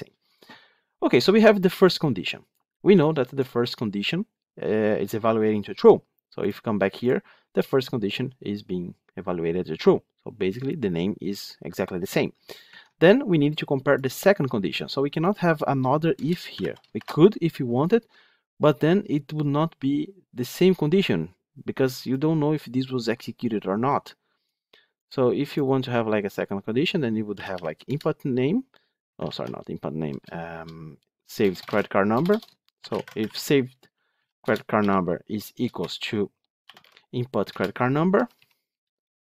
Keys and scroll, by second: 27.8 Return, 29.1 ctrl+z, 34.3 Return.